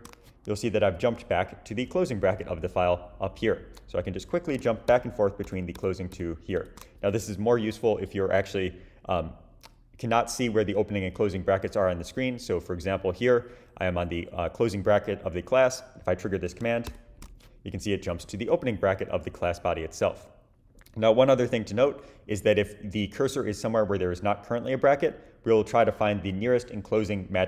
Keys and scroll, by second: 4.9 shift+super+\, 7.6 Down, 16.9 shift+super+\.